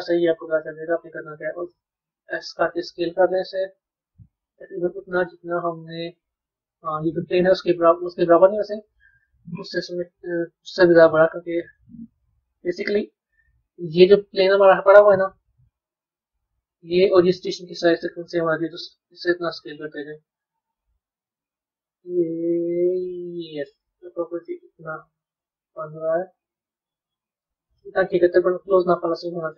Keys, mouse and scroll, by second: 0.5-1.8 scroll down 7, 1.8 s, 6.0 scroll down 1, 6.0-10.7 middle drag, 10.7 s, 12.0-15.0 middle drag, 15.6 click, 18.7 click, 20.9 s, 28.3-29.5 middle drag.